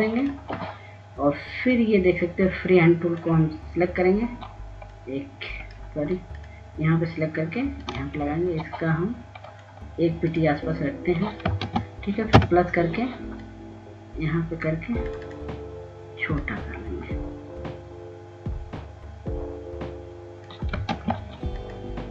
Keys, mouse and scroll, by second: 2.9 click, 4.5-6.3 drag, 6.5-7.1 scroll up 1, 7.6-9.7 shift+drag, 10.5 shift+click, 14.3 ctrl+space, 16.1-22.1 drag.